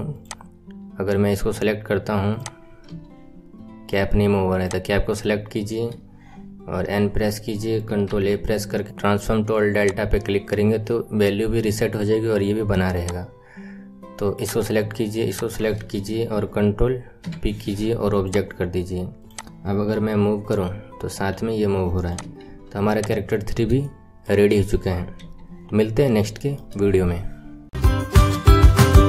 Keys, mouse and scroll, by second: 0.2 click, 0.5-2.3 scroll up 3, 2.3 click, 3.0 g, 4.6 click, 6.7 n, 8.8-10.0 shift+middle drag, 10.0 ctrl+a, 13.2 click, 14.3 click, 15.3 shift+click, 18.4 ctrl+p, 19.3 click, 19.5-20.0 scroll down 5, 20.0 g, 22.1-24.0 drag, 24.0-25.2 shift+middle drag, 25.2 n, 26.0 scroll down 2, 26.4-28.4 shift+middle drag.